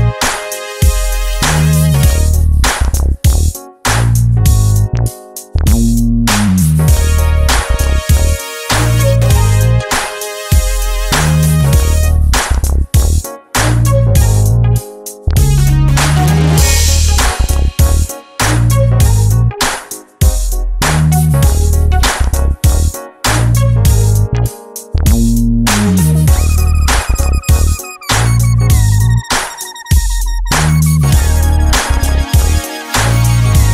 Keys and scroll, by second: 7.3 Escape, 7.5 Escape.